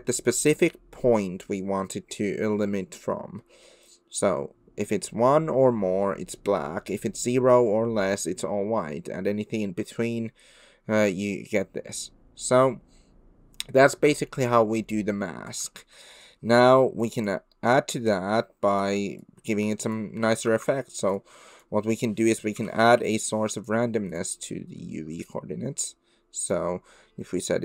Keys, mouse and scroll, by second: 15.9 middle click, 17.0 click, 17.7 click, 18.6 click, 19.2 click, 20.5 shift+a, 21.1-24.2 drag, 26.5-27.6 drag.